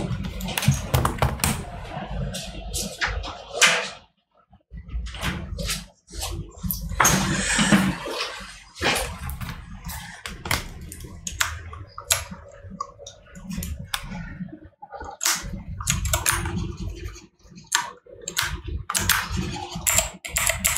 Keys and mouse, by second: 15.7 right click, 18.7 right click.